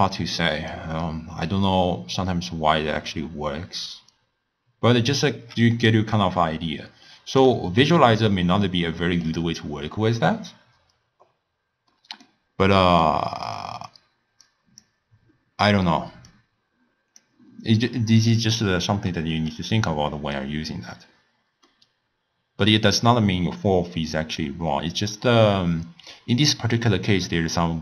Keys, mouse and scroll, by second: 0.8 d, 0.9 d, 1.7-5.3 drag, 5.3 d, 5.4 d, 5.9-7.5 right drag, 7.5 d, 7.9-14.3 middle drag, 14.5-15.2 drag, 21.8-27.8 middle drag.